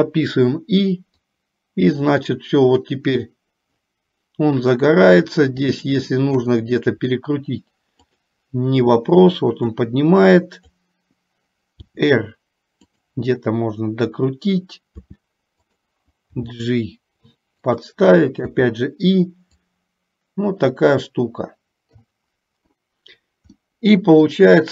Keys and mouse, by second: 1.5-3.4 drag, 5.8 shift+middle click, 8.3 click, 9.9-11.5 drag, 12.0 r, 16.5 r, 16.5 g, 19.3-20.0 typing, 19.8-22.8 drag, 23.9 middle click.